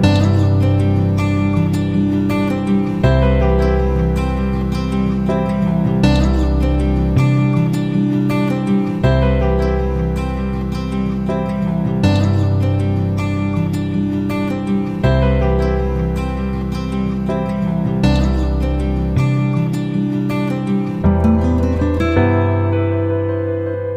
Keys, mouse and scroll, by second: 3.6-7.7 drag, 8.1 click, 10.2 click, 13.0 F9, 13.8 click, 17.3 ctrl+z, 18.1-23.9 drag.